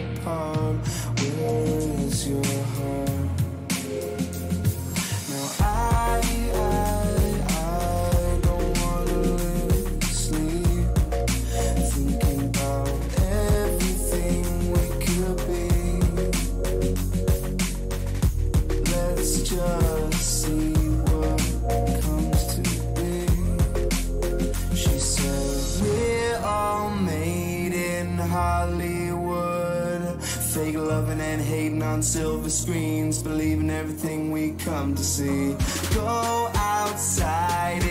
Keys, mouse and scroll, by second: 2.5 a, 2.8-6.4 middle drag, 4.8 a, 5.1 a, 5.6-7.6 right drag, 6.4-8.3 drag, 13.8 a, 14.2-16.1 right drag, 15.0-17.1 drag, 18.3 a, 18.8-21.1 right drag, 20.0-22.2 drag, 21.6 a, 22.2-24.0 right drag, 22.9 a, 24.0 middle click, 28.2-32.2 middle drag, 33.9-37.8 middle drag.